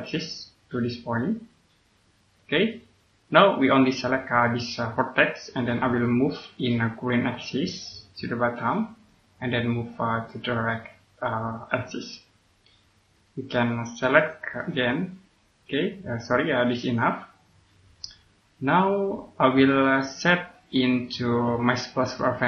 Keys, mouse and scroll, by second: 3.8 right click, 5.5 scroll down 1, 6.2 scroll down 1, 6.5 middle click, 7.8 click, 12.4 scroll up 1, 13.0 click, 13.6 scroll up 1, 14.0 right click, 14.7 click, 18.0 scroll down 1, 19.4 middle click, 19.9 click.